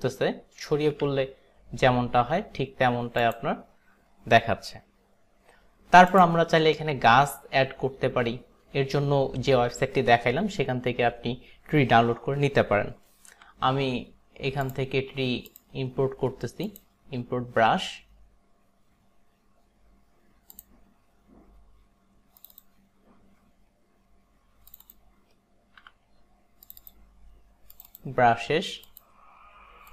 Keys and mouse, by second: 1.1 ctrl+z, 3.2 click, 6.2 click, 13.4 b, 14.7 click, 15.6 click, 16.8 click, 22.6 click, 24.9 click, 25.9 b, 26.8 click, 27.9 click.